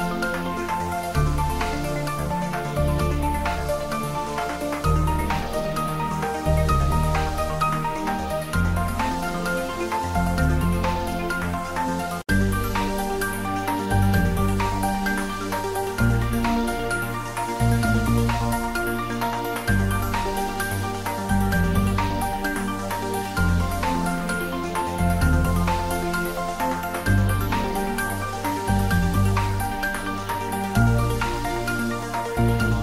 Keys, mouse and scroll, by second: 2.3 click, 4.7 click, 6.0 click, 7.1 click, 9.4 click, 12.6 click, 14.8 click, 17.1 click, 20.2-22.3 drag, 24.4 click, 26.8 click, 27.9 click, 31.4 click.